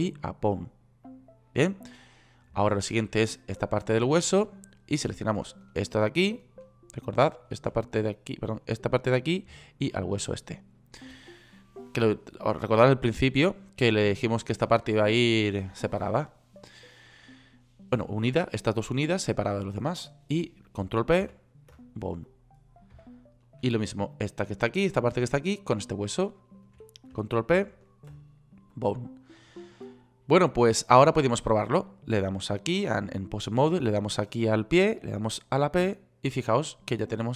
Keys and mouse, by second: 12.3-21.7 middle drag, 21.7 ctrl+p, 28.0 ctrl+p, 30.4 click, 36.3 g.